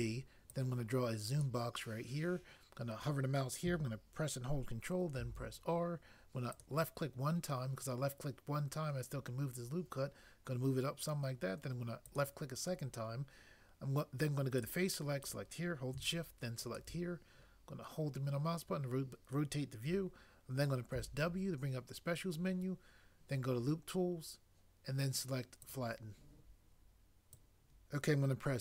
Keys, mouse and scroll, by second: 0.5 click, 5.2 ctrl+r, 6.5 click, 6.6 click, 14.6 click, 16.7 shift+click, 20.9 w, 25.6 click, 27.4 click.